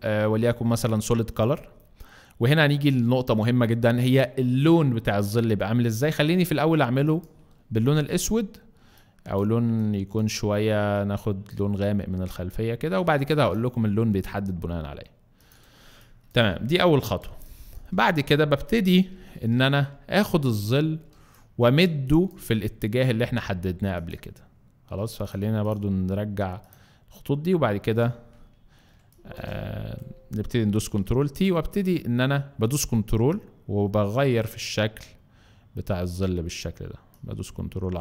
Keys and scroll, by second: 17.2 space, 19.1 t, 21.1 space, 28.9 alt+space, 30.8 t.